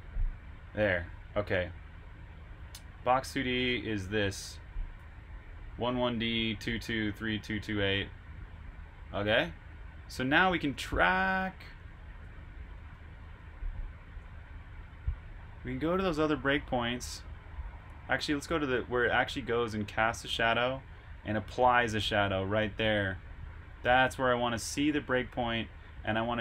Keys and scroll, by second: 4.9 super+c, 10.7 super+Tab, 13.1 super+Tab.